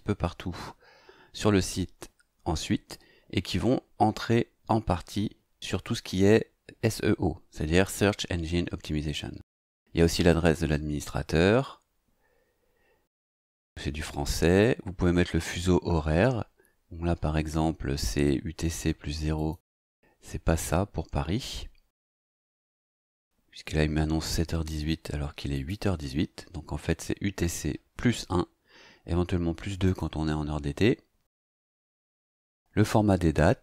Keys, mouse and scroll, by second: 11.9 scroll down 2, 12.7-17.4 scroll down 2, 17.4-19.3 scroll down 1, 19.3 click, 19.7-25.5 scroll down 2, 25.5 click, 28.2 scroll down 2, 29.8 click.